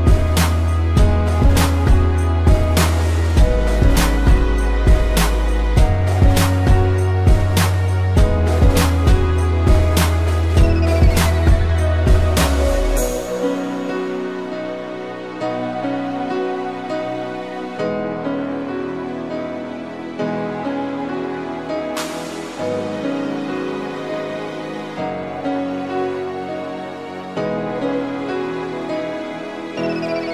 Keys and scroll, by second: 0.3 p, 1.0 space, 15.6 a, 19.6 Delete, 20.9 ctrl+0.